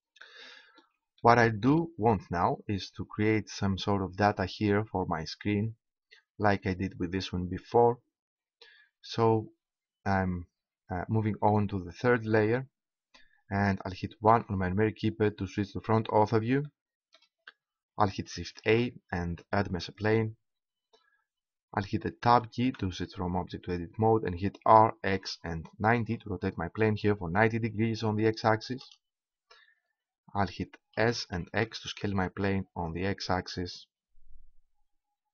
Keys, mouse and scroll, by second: 1.4-2.6 right drag, 12.0-14.0 drag, 14.3 KP_1, 18.6 shift+a, 22.6 Tab, 24.6 r, 31.0 s.